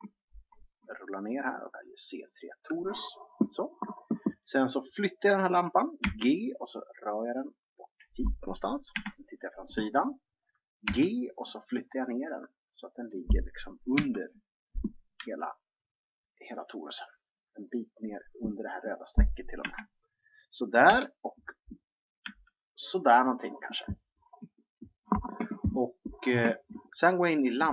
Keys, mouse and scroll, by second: 0.9-2.2 scroll up 1, 2.2-3.4 scroll up 1, 3.4-5.9 scroll up 1, 5.9 scroll up 1, 6.0 g, 8.9 KP_3, 10.9 g, 14.0 KP_1, 15.2 g, 19.5 KP_3, 20.9 KP_7, 22.2 g, 27.4-27.7 drag.